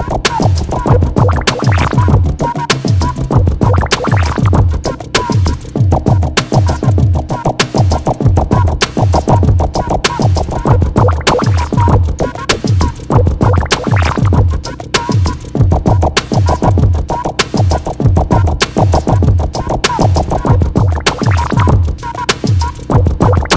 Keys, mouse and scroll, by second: 3.8 alt+scroll down 1, 4.2 alt+scroll up 1, 4.2 alt+scroll down 1, 4.3 alt+scroll up 1, 5.7-9.6 drag, 9.6 alt+scroll down 1, 10.4 alt+scroll up 1, 11.5 click, 14.0 x, 14.3 click, 15.5 x, 15.6 click, 17.6 x, 17.8 click, 18.6-19.0 alt+scroll down 2, 19.4-20.0 alt+scroll up 1, 20.0 click, 20.7 x, 21.0 click, 22.1 alt+scroll down 1, 22.7-23.1 alt+scroll up 1.